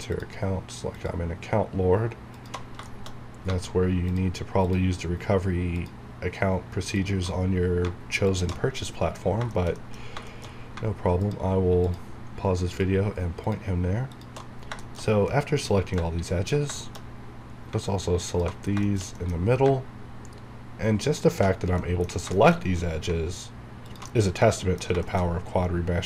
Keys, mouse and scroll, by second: 0.1 click, 2.9 shift+middle click, 3.2 scroll up 1, 4.1 alt+shift+click, 7.4 shift+scroll down 1, 8.3 alt+shift+click, 8.6 shift+scroll down 1, 8.9 middle click, 9.2 scroll up 1, 9.5 shift+middle click, 10.1-11.2 scroll up 3, 10.3 shift+middle click, 11.2 alt+shift+click, 14.6-15.1 shift+scroll down 3, 14.8 shift+middle click, 15.3-16.8 middle drag, 17.7-18.2 scroll up 1, 18.3 alt+shift+click, 18.6 shift+scroll down 1, 18.9 shift+middle click, 19.2 scroll down 1, 19.7-21.2 scroll up 1, 21.2 alt+shift+click, 21.6 shift+scroll down 1, 21.8 middle click, 22.6 shift+scroll up 1, 24.2 scroll down 1, 24.4 middle click, 25.3 shift+scroll up 1, 25.9-26.0 scroll down 3.